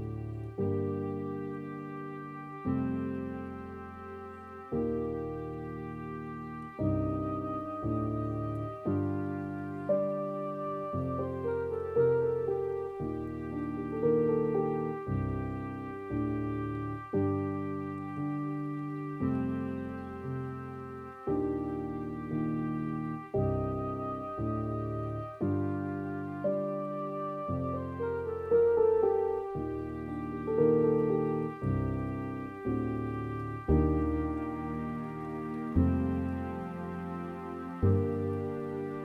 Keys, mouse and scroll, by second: 0.5 scroll up 1, 0.6 scroll down 2, 0.9-2.5 middle drag, 2.5-3.0 scroll down 2, 3.0 scroll up 3, 3.2-4.6 middle drag, 4.6-5.9 scroll up 1, 5.9-6.3 scroll down 7, 6.3-14.9 middle drag, 18.7-25.3 drag, 27.4 scroll up 4, 27.7-30.4 middle drag, 30.4-32.8 drag, 34.2 scroll up 2, 34.5-39.0 middle drag.